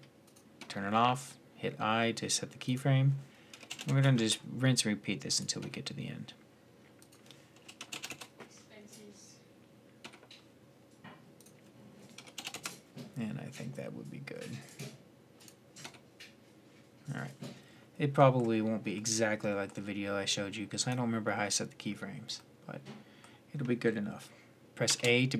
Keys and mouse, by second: 0.0 click, 2.4-3.9 drag, 5.4 i, 9.8 i, 14.4 click, 15.5-18.8 middle drag, 20.6-22.6 drag, 24.7 shift+a.